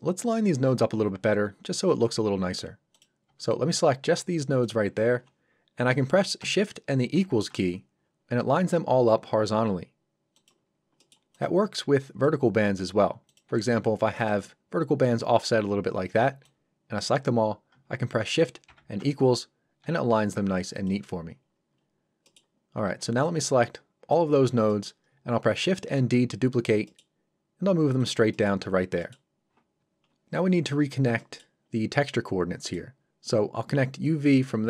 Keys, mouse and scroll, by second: 2.9 click, 3.2 b, 3.5 click, 7.1 shift+=, 9.3 =, 10.3 click, 10.7 scroll up 1, 10.9 middle click, 11.3 click, 11.6 b, 11.7 click, 12.4 scroll up 1, 13.2 click, 13.5 g, 14.1 click, 16.3 b, 16.4 click, 18.6 shift+=, 19.8 =, 20.7 click, 21.4 scroll down 1, 22.2 middle click, 22.8 b, 23.2 click, 24.3 scroll down 1, 24.6 middle click, 26.8 middle click, 28.0 click, 28.3 middle click, 28.6 scroll up 1, 29.0 middle click, 31.2 middle click, 31.7 scroll up 1, 32.7 middle click, 34.0 click.